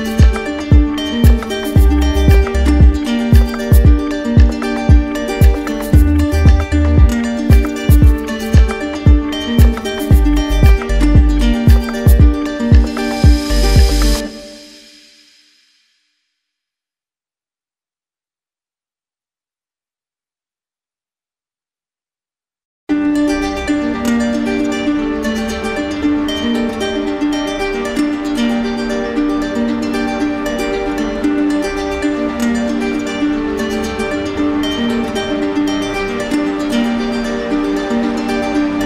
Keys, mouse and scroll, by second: 0.6 ctrl+z, 15.1 click, 16.7 click, 18.3 click, 21.6 click, 23.0 click, 24.5 middle click, 24.6 click, 28.2 click, 30.4 click, 30.6 ctrl+z, 32.5 click, 32.7 ctrl+z, 38.5 click.